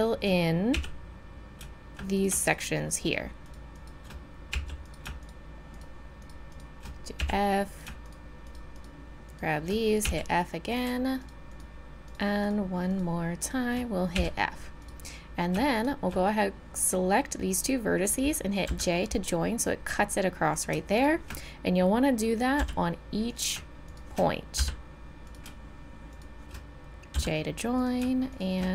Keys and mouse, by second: 0.7 f, 2.1-4.8 right drag, 4.5 f, 7.2 f, 10.0 f, 14.1 f, 18.7 j, 22.6 j, 24.6 j, 27.1 j.